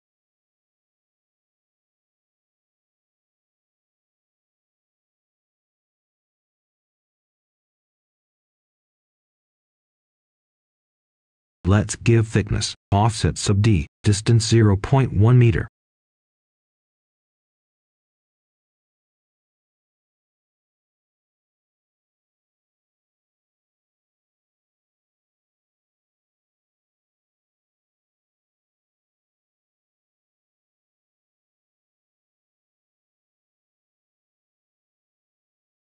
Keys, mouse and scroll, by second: 0.5 right click, 2.8 Tab, 4.4 click, 4.7 right click, 5.6 Tab, 6.7 click, 7.3-7.9 scroll up 1, 7.9 right click, 9.0 o, 12.2 Return, 14.3 click, 15.5 0, 16.0 click, 17.4 1, 17.7 Return, 19.2-24.1 right drag, 24.1-24.6 scroll down 1, 24.6-27.4 scroll up 1, 28.4 right click, 29.8 ctrl+shift+click, 31.1 Tab, 32.1 ctrl+shift+click, 33.0 ctrl+shift+z, 33.1-33.6 scroll up 2, 33.6-34.1 scroll down 1, 34.1 right click, 35.3 ctrl+shift+click.